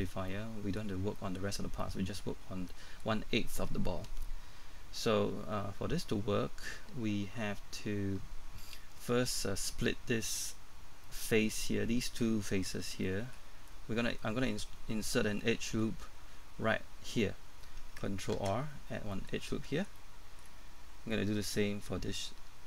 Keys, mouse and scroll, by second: 0.9 scroll down 1, 1.2 middle click, 12.1-12.4 scroll up 1, 13.0 shift+middle click, 15.8-17.4 scroll up 1, 17.4-18.0 scroll down 1, 19.1 middle click, 19.6 scroll down 1, 20.0 shift+middle click, 21.1 middle click.